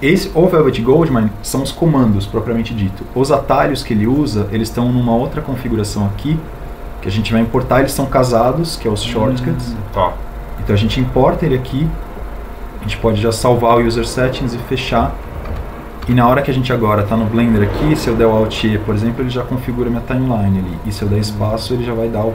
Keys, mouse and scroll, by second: 19.2 alt+e.